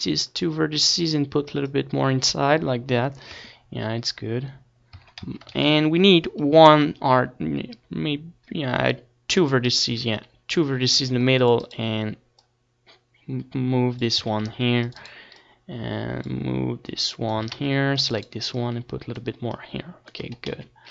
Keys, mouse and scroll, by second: 1.5 click, 3.1 Tab, 4.7 Tab, 4.9 a, 5.4 ctrl+r, 9.3 click, 9.5 right click, 9.8 a, 10.3 c, 11.5 right click, 13.6 click, 14.4 a, 14.4 c, 15.3-19.8 drag, 17.2 a, 17.4 c, 20.2 Tab, 20.2 click, 20.5 z.